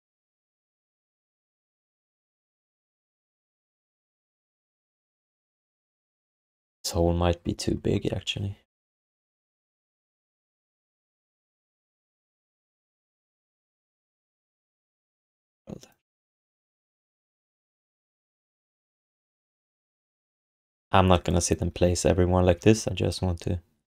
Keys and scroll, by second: 9.7 1, 13.1 q, 13.9 w, 18.2 q, 18.5 w, 22.5 ctrl+d.